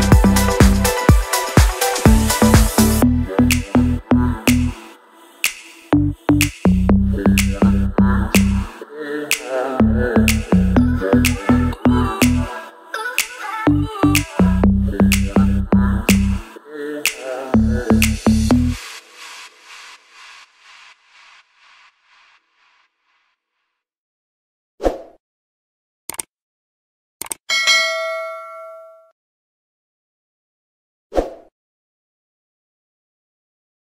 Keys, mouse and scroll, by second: 1.6 Right, 2.1-2.5 drag, 3.3-4.0 scroll down 2, 4.0 click, 4.3 alt+scroll up 1, 4.9-8.0 drag, 8.8-9.1 alt+scroll down 1, 9.1 alt+scroll up 1, 9.4-10.1 click, 10.3 right click, 10.8 click, 11.4-12.2 alt+scroll up 3, 12.2 alt+scroll down 1, 16.2-17.4 click, 17.4 ctrl+z, 18.0-19.0 drag.